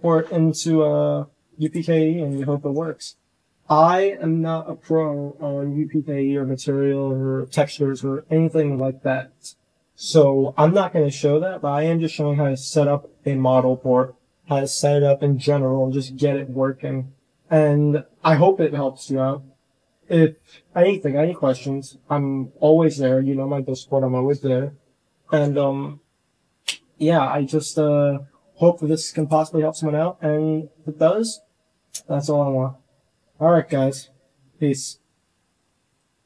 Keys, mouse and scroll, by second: 1.5 click, 1.8 h, 2.2 click, 2.9 h.